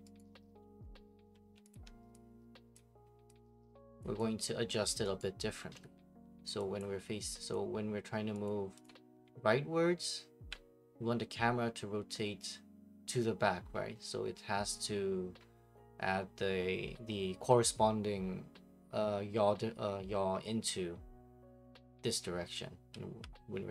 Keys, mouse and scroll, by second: 0.2 right click, 0.5 middle click, 0.6 middle click, 1.6 b, 1.7 click, 2.7 click, 4.0 click, 4.9 click, 5.2 right click, 6.8 right click, 7.5 click, 8.4 click, 8.8 click, 9.2-10.4 d, 22.9 s.